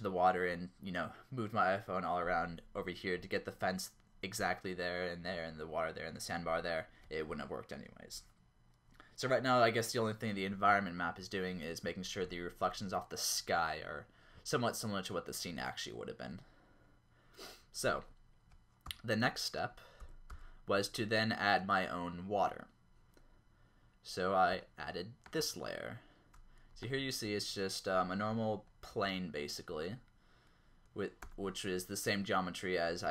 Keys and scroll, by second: 11.2-12.3 typing, 15.5 q, 18.8 0, 20.0 z, 20.3 z, 23.3 typing, 28.9 Tab, 31.4 Tab.